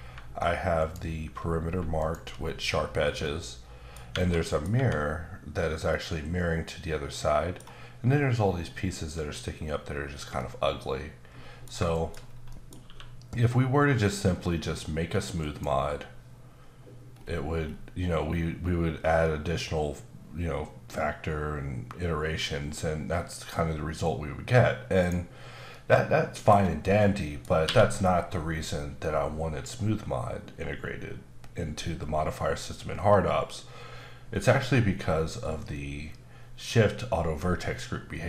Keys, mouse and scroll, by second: 0.8 alt+click, 2.0 alt+click, 2.0 alt+click, 3.2 middle click, 4.1 Tab, 4.4 middle click, 4.7 Tab, 10.4 middle click, 11.9 shift+middle click, 12.2 scroll down 1, 12.5 middle click, 12.8 q, 15.4 click, 17.1-19.9 scroll up 5, 19.9 scroll up 1, 21.6-24.3 scroll up 3, 25.0 right click, 25.7 middle click, 27.0 middle click, 27.6 q.